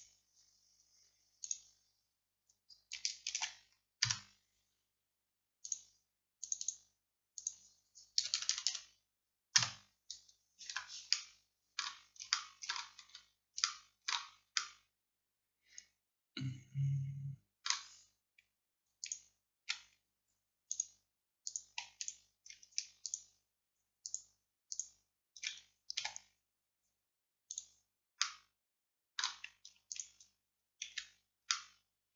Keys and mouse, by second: 1.5-3.2 drag, 3.3 shift+d, 4.1-5.7 drag, 8.4 BackSpace, 8.6 BackSpace, 10.8 Tab, 20.8-26.1 middle drag, 26.1 x, 28.3-32.1 drag.